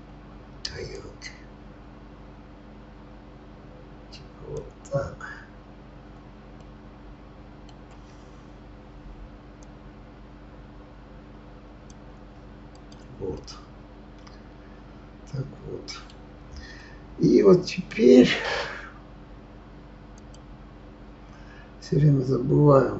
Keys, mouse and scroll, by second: 0.9-3.9 drag, 6.6-9.6 middle drag, 9.6-12.6 drag, 12.7 click, 13.3-16.4 middle drag, 20.1 click.